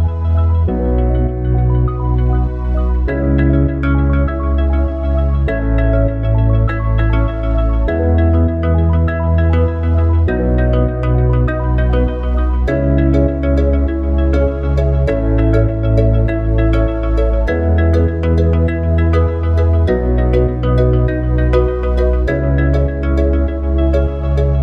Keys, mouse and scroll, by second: 7.9 ctrl+alt+KP_0, 11.0 click, 14.2-17.7 drag, 18.8 shift+f.